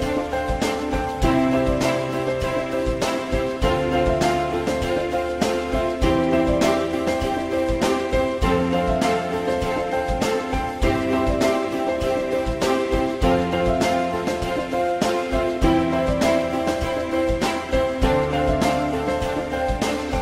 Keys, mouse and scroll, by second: 3.4 alt+middle click, 11.9 shift+click, 12.9 shift+double click, 13.4 ctrl+click, 16.5 ctrl+click, 17.6 ctrl+click, 17.8 ctrl+click, 18.2 ctrl+click, 18.4 ctrl+click, 18.9 ctrl+click, 20.0 ctrl+click.